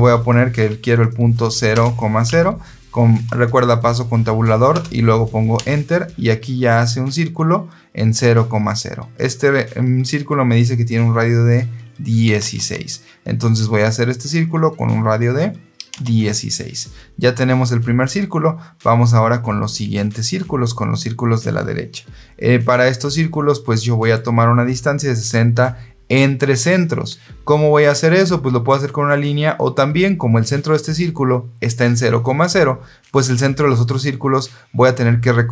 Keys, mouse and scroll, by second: 1.6 KP_0, 2.2 Tab, 4.6 KP_0, 5.5 KP_Enter, 12.1 KP_1, 12.3 KP_6, 15.8 KP_Enter.